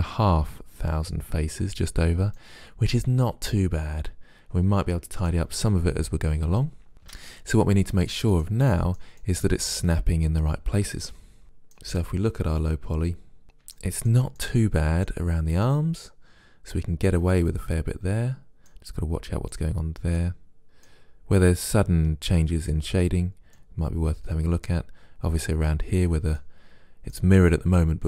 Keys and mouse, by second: 2.5 middle click, 2.9-4.3 middle drag, 6.6-10.8 middle drag, 7.2 Tab, 14.9 middle click, 17.5 middle click, 19.6-22.2 middle drag, 23.6-28.0 middle drag.